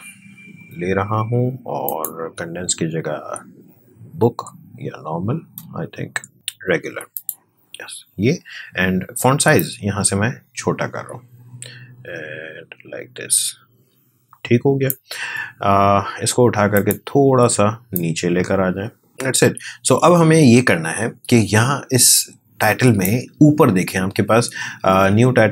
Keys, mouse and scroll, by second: 1.8 click, 5.9-6.3 scroll up 1, 6.3-7.1 scroll down 1, 7.1 click, 9.5-19.1 drag.